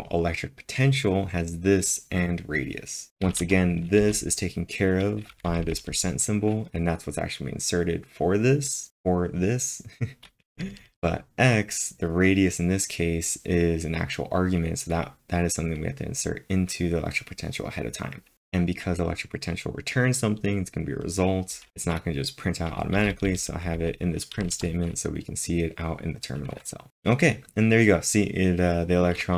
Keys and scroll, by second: 2.8-3.6 typing, 5.3 b, 18.1-18.8 typing, 23.0-24.5 typing.